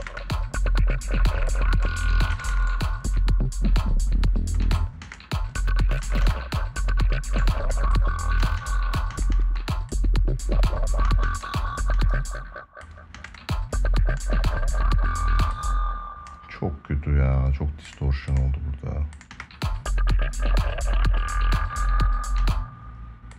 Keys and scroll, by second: 2.0 space, 4.3 space, 8.1 space, 10.7 space, 12.9 space, 15.1 space, 19.0 space, 22.1 space.